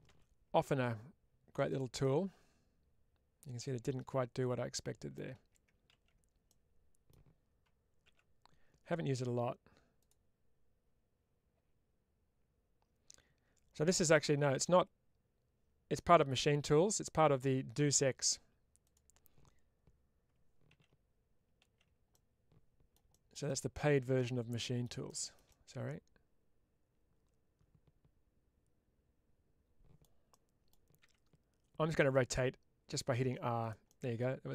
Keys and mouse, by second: 1.5 click, 2.0-5.1 middle drag, 6.5 middle click, 9.9 click, 18.7 click, 22.0 middle click, 23.4-24.7 middle drag, 25.5-29.9 middle drag, 30.2 middle click, 33.5 click, 33.8 middle click.